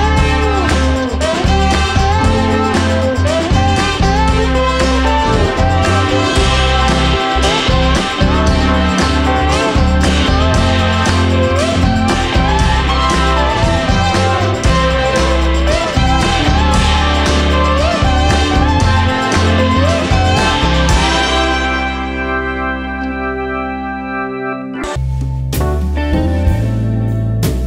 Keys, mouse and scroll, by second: 2.2 click, 8.1 click, 15.6 click, 20.4 click, 22.7-25.4 drag.